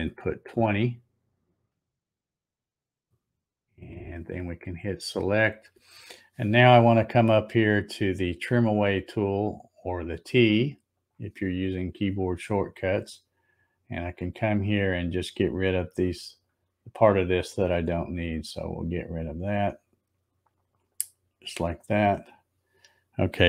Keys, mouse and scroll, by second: 5.0 click, 11.0 click, 14.8 click, 16.3 click, 18.2 click, 19.5 click, 20.9 click, 22.3 click.